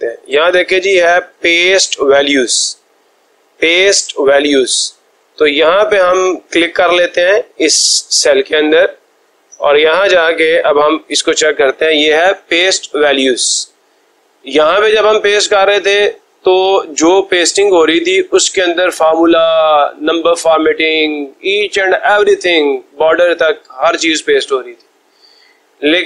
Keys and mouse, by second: 5.9 click, 6.5 click, 9.6 click.